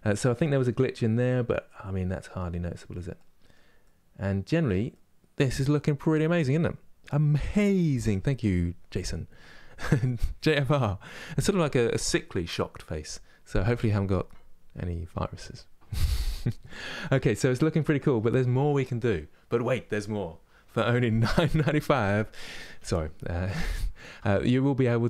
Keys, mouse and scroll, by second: 0.2-2.4 middle drag, 2.4-2.8 scroll down 1, 2.8-24.3 middle drag, 24.3-25.0 drag.